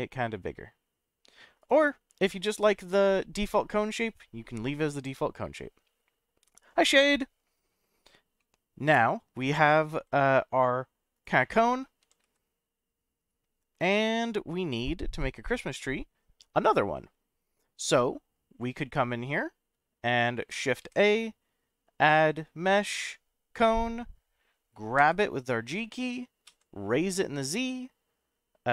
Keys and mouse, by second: 1.6 right click, 2.5 ctrl+z, 3.1-5.0 middle drag, 8.4-9.6 middle drag, 9.9 s, 11.1 click, 11.4 middle click, 12.0 g, 12.2 z, 13.8 click, 14.1-15.2 middle drag, 20.8 shift+a, 25.0 g, 26.5 z.